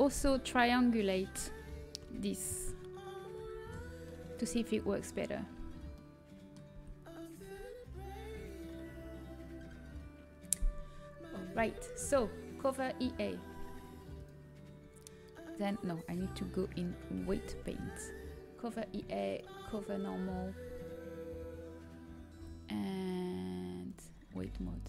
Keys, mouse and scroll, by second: 0.1 Tab, 0.1 h, 2.3 a, 3.3 ctrl+t, 4.8 middle click, 6.9 a, 7.3 Tab, 12.5-15.9 drag, 19.2-21.0 drag.